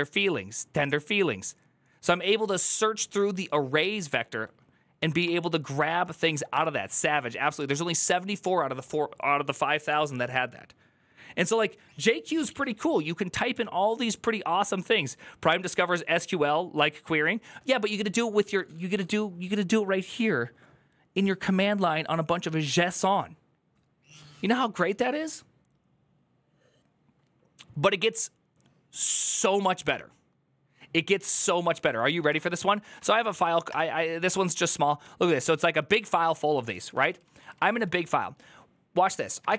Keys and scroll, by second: 5.5 Down, 5.6-6.8 typing, 31.7-33.2 typing, 33.5 Return, 34.9-35.7 typing, 35.9 ctrl+d, 36.2 ctrl+u, 36.3 ctrl+u, 36.5 ctrl+u, 36.7 ctrl+u, 37.1 ctrl+u, 37.5 ctrl+u, 37.7 ctrl+u, 39.3 shift+v.